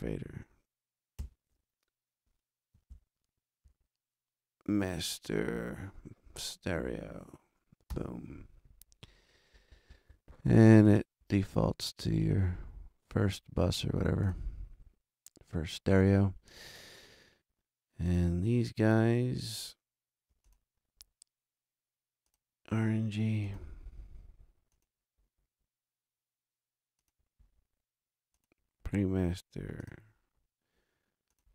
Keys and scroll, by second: 1.2 shift+super+n, 2.9 super+Down, 5.7 super+Right, 7.9 Return.